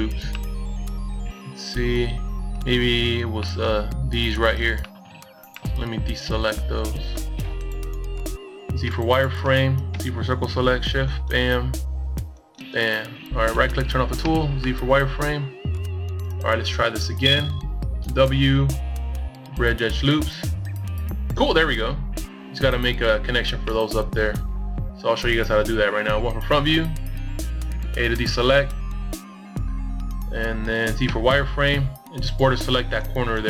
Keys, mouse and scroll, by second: 0.4 middle click, 1.0 middle click, 3.3 KP_1, 4.3 z, 5.4 c, 9.6 z, 10.0 middle click, 13.4 w, 16.9 middle click, 18.9 middle click, 21.3 KP_1, 23.1 a, 26.2 z, 27.4 b, 30.7 KP_Decimal.